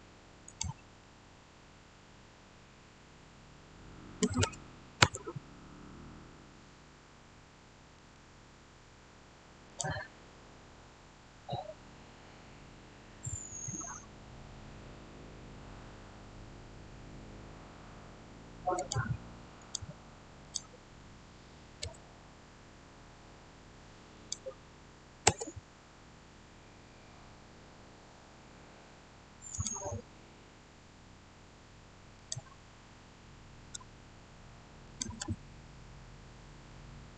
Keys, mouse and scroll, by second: 0.3 click, 4.1 typing, 4.9 Return, 9.6 click, 18.6 click, 21.8 Return, 24.0 click, 25.1 Return, 31.3 click, 32.0 click, 33.7 Return, 34.7 click, 35.1 Return.